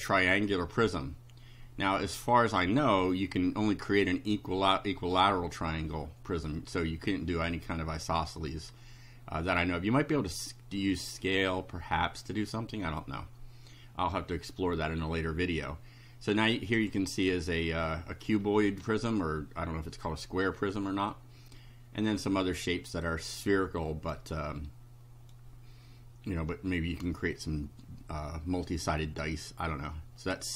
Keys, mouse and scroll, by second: 16.4 click, 21.6-22.6 right drag, 23.5 right click, 24.6 right click, 30.2 click.